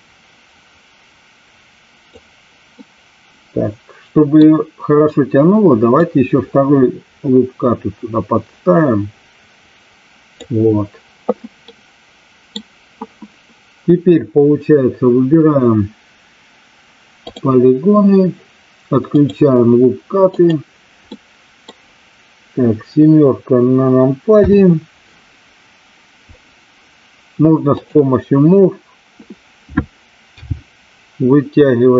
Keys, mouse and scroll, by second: 2.8 middle click, 3.8 middle click, 5.9-10.3 drag, 11.6-12.6 middle drag, 21.1 middle click, 24.3 KP_7, 30.2 g.